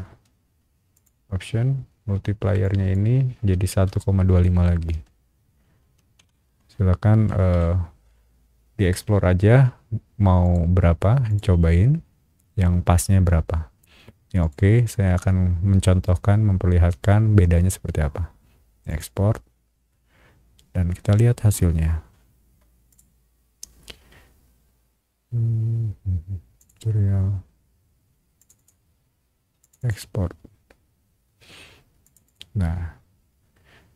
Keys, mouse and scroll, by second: 0.9 click, 2.6 click, 3.8 KP_1, 4.9 ., 6.2 BackSpace, 6.4 ,, 7.3 KP_2, 7.5 KP_5, 10.4 click, 11.3 click, 14.4 click, 18.9 click, 22.9 click, 26.6 click, 28.4 click, 28.5 click, 29.6 click, 29.8 click, 32.0 click, 32.2 click.